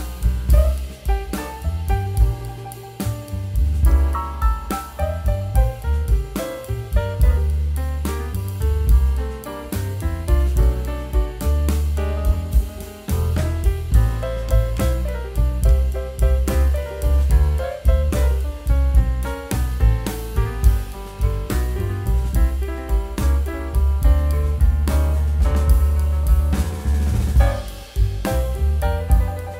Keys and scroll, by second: 2.3 super+z, 4.7 super+z, 6.0 super+z, 8.8 super+z, 11.3 super+z, 15.0 super+z, 23.8 super+z.